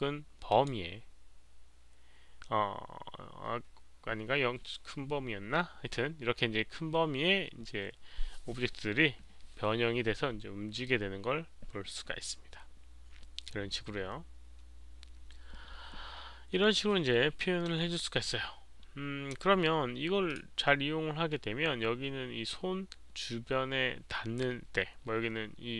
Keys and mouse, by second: 0.4 click, 1.6 click, 5.5 click, 7.3 click, 20.5 click, 24.6 click.